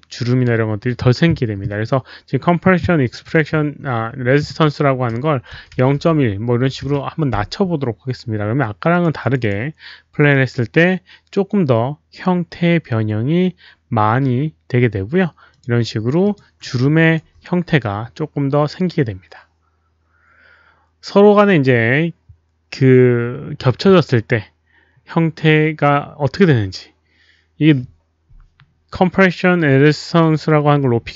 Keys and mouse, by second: 3.0 click, 3.2 click, 5.4 KP_0, 5.8 KP_Decimal, 6.7 KP_1, 8.9 click, 9.1 click, 9.4 click, 10.3 click, 14.0 Return, 14.0 click, 14.0 KP_1, 14.0 KP_Decimal, 14.0 KP_0, 15.5 click, 15.6 Return, 15.6 KP_1, 15.6 KP_Decimal, 15.6 KP_0, 16.2 click, 16.7 alt+click, 30.2 click.